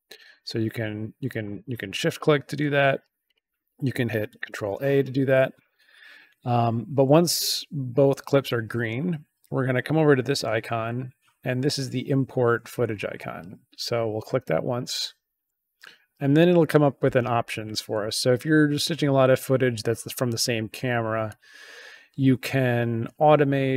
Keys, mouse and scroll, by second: 1.2 click, 2.0 shift+click, 3.2 click, 4.5 ctrl+a, 14.2 click, 18.2-21.3 drag.